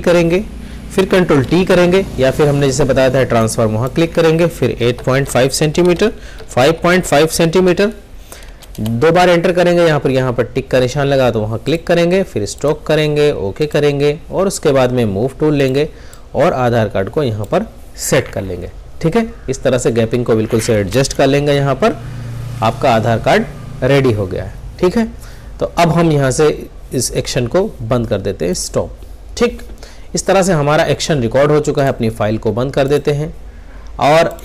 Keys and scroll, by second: 1.2 ctrl+t.